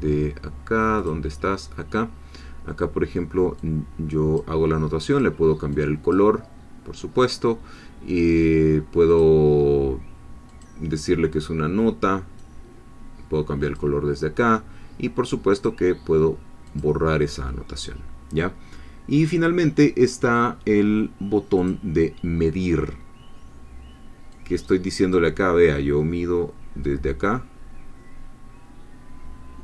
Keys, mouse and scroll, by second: 1.0 click, 3.6 click, 5.1 click, 5.7-7.8 drag, 9.1 click, 10.5 click, 12.4-14.0 drag, 15.6 click, 16.8 click, 21.6-23.1 drag, 24.3 click, 27.5-29.6 drag.